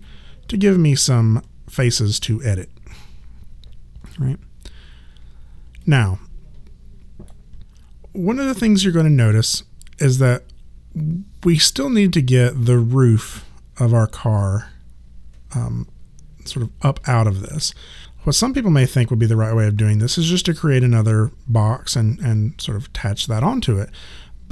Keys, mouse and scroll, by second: 0.0 alt+click, 5.8 alt+click.